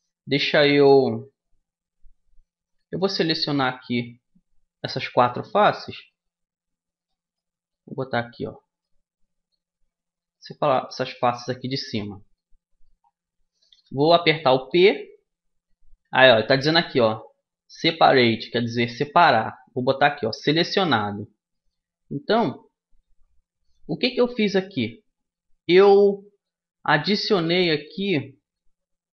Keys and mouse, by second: 3.2-11.6 drag, 4.9 middle click, 5.8 right click, 11.6-14.4 middle drag, 14.4 p, 25.6-29.0 middle drag, 29.0 g.